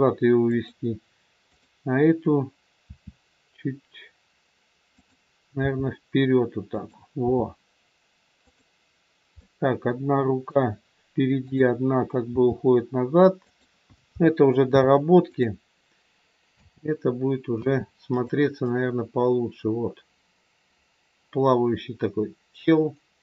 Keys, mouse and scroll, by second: 1.5 click, 2.9 r, 5.5 g, 7.2 r, 9.3 middle click, 11.5 click, 12.3 g, 14.1 a, 14.7 i, 16.4 space, 17.4 space, 18.1 click, 18.6 click.